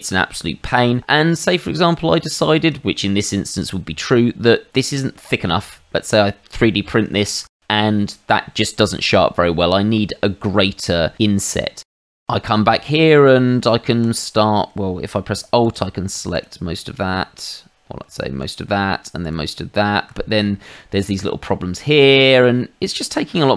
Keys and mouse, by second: 1.0 middle click, 1.9 middle click, 2.8 shift+middle click, 4.8 middle click, 6.3 middle click, 12.1 middle click, 14.0 shift+click, 15.6 alt+click, 16.3 alt+click, 17.4 alt+click, 19.2 alt+shift+l, 20.4 shift+middle click, 21.2 middle click, 22.3 shift+middle click, 23.1 middle click.